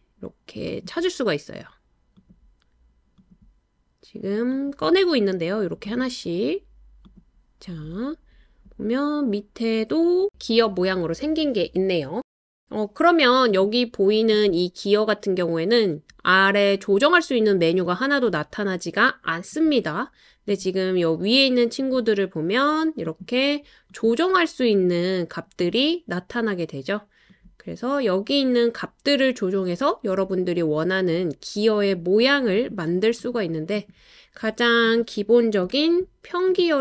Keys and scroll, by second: 35.6 BackSpace.